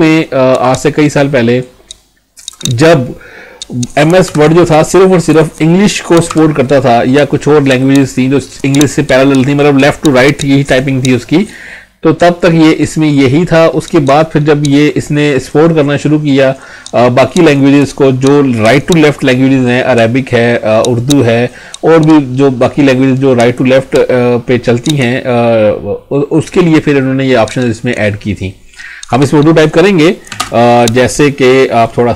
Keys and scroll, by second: 4.2 Delete, 30.4 space.